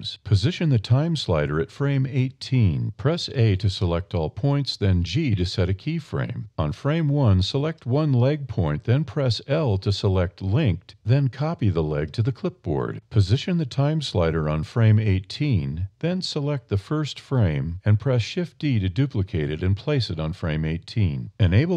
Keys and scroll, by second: 4.0 g, 7.6 1, 8.1 super+i, 8.5 super+o, 12.7 a, 17.6 shift+d.